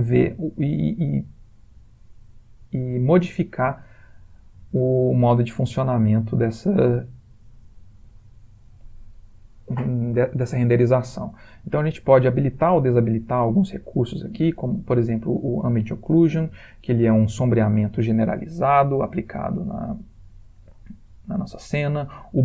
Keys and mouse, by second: 9.7 click, 14.2 click, 21.4 click.